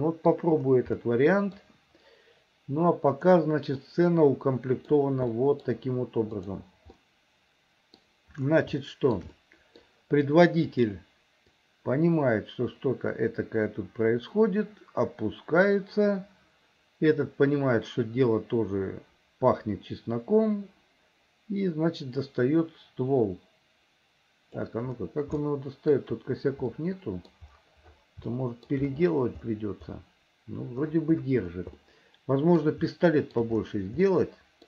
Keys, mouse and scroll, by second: 1.1 middle click, 3.9-4.9 middle drag, 5.4 middle click, 6.5 click, 7.1-8.1 middle drag, 8.8 shift+middle click, 9.4 middle click, 10.9 click, 11.7-24.9 drag, 25.5 shift+middle click, 26.8 middle click, 28.4 shift+middle click, 31.9 middle click, 33.0 shift+middle click, 34.1 middle click.